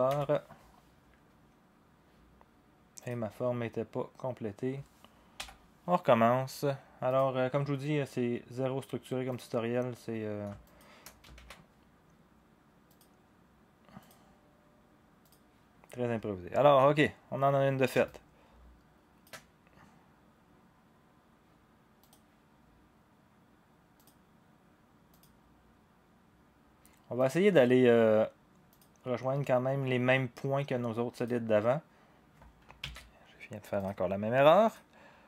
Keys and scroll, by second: 0.1 Return, 5.4 Delete, 11.4 ctrl+a, 11.4 ctrl+z, 32.8 ctrl+z.